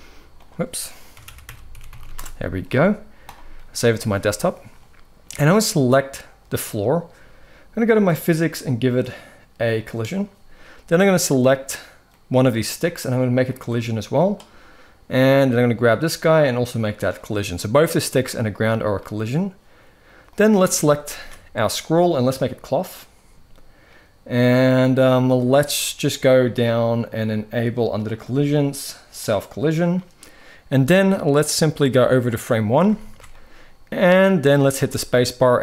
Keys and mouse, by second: 4.6-6.3 middle drag, 7.6 click, 10.7 click, 13.3-14.9 drag, 16.4 click, 20.8 ctrl+s, 22.1 click, 27.8 click, 28.9-30.1 drag, 31.1-32.5 drag, 32.8 ctrl+s, 33.0-34.2 middle drag, 34.5 space, 35.2-35.6 middle drag.